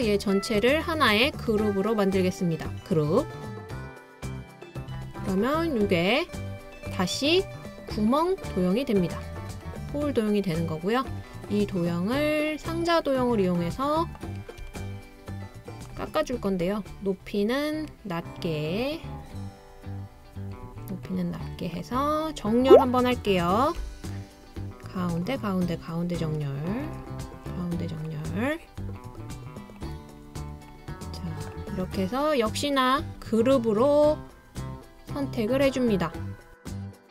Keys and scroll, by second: 23.8 l.